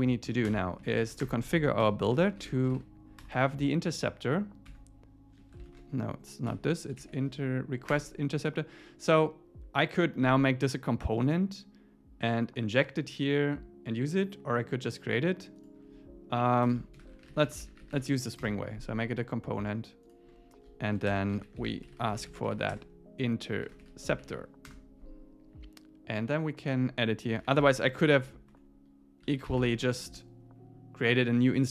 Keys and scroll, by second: 0.3 Left, 0.5 Return, 0.8 Up, 1.0 super+Right, 1.2 Return, 4.7 Tab, 5.7 shift+super+Left, 7.9 Return, 16.7 Return, 17.0 alt+l, 18.5 Return, 24.7 Return.